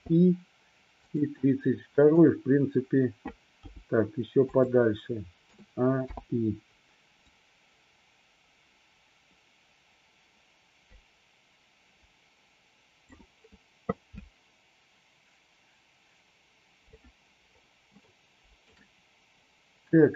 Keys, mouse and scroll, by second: 0.0 i, 1.2 drag, 3.7 g, 4.5 click, 5.5 a, 6.1 i, 7.4-13.2 drag, 18.1-18.7 shift+middle drag.